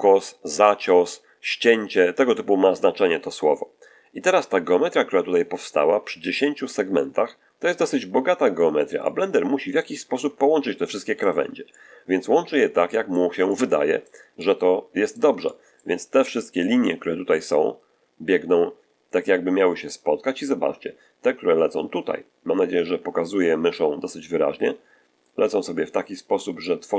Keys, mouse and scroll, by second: 8.9-11.3 drag, 11.6-13.2 drag, 13.4 click, 14.2 click, 15.2 shift+middle click, 15.3 shift+middle click, 16.4-16.9 shift+scroll up 2, 20.4-20.9 scroll down 2, 26.5 shift+click.